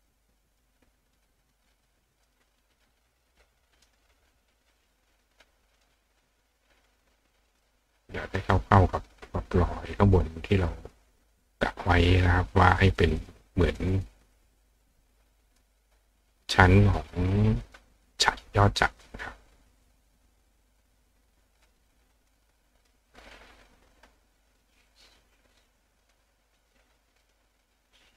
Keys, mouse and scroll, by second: 0.1 click, 1.1 click, 2.1 click, 2.4 click, 2.8-3.9 drag, 5.8 click, 7.0 click, 8.4-9.6 drag, 10.4 click, 13.0 click, 13.2 click, 13.8 click, 14.2 click, 15.1 click, 16.3 click, 17.3 click, 17.6 click, 18.1 click, 19.0 click, 20.5 click, 21.1-22.3 drag, 22.8 click, 23.0 click, 23.4 click, 24.9 click, 25.6 click, 27.2 click.